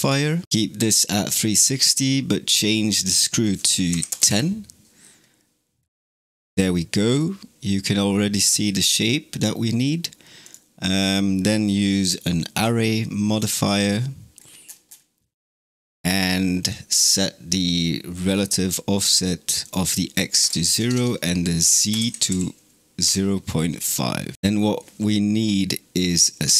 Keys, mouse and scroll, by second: 2.8-5.6 drag, 5.6-6.1 scroll down 4, 6.1-9.5 shift+middle drag, 12.5 click, 13.8-16.3 scroll down 19, 19.5-20.8 drag, 20.8 Tab, 24.3-25.5 scroll up 9.